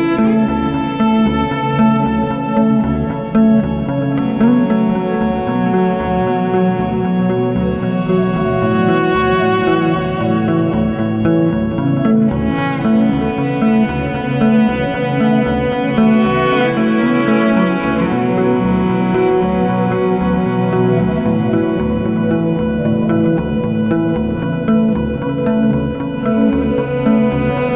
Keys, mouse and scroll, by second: 6.1 BackSpace, 6.1 BackSpace, 8.8 click, 15.5 click, 15.7 alt+z, 16.3-21.2 drag, 21.8-22.2 scroll down 11, 22.2 g.